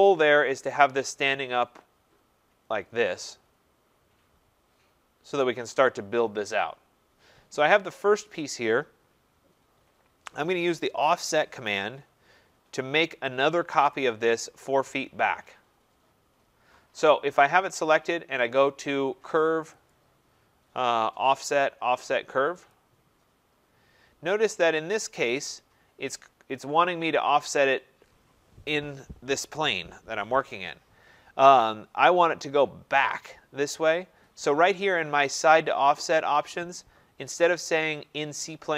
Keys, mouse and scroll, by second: 5.4 right click, 13.9 click, 19.9 click, 22.7 click, 24.5-25.0 scroll.